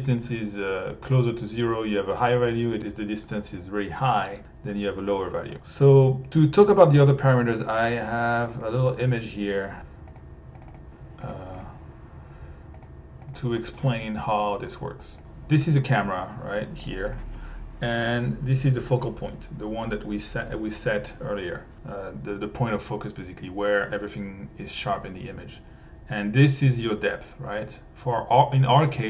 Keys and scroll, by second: 9.8 r, 13.2 1.